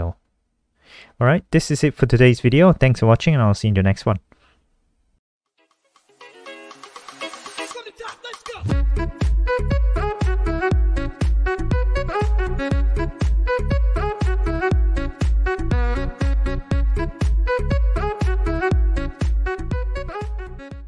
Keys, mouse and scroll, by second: 2.0 click.